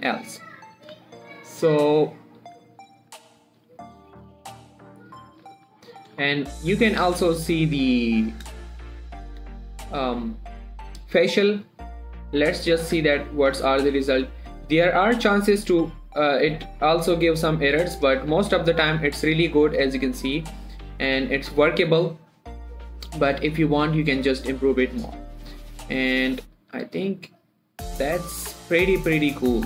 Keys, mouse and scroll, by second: 0.0 click, 0.1 g, 0.8 right click, 1.1 click, 1.2 g, 2.1 right click, 2.7 click, 2.9 g, 3.6 right click, 3.9 r, 4.7 right click, 5.8 click, 6.0 shift+middle click, 6.2 scroll up 1, 6.7 shift+middle click, 6.9-7.5 scroll up 1, 7.5 z, 10.1-10.6 scroll down 1, 13.5 scroll up 1, 14.3 shift+middle click, 14.4-14.9 shift+scroll up 1, 14.9 click, 15.4 g, 17.8 right click, 18.4 click, 18.6 g, 19.8 right click, 20.8 click, 21.4 g, 23.7 g, 23.8 right click, 24.3 g, 25.4 right click, 26.4 click, 27.0 g, 28.5 right click, 28.8 shift+middle click, 29.2 scroll up 1.